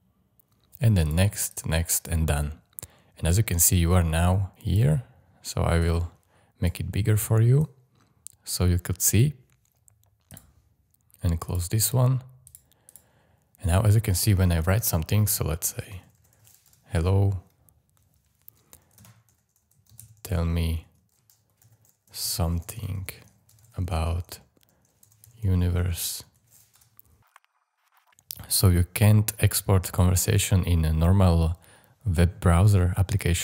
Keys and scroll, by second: 15.6-16.8 typing, 18.7-26.8 typing.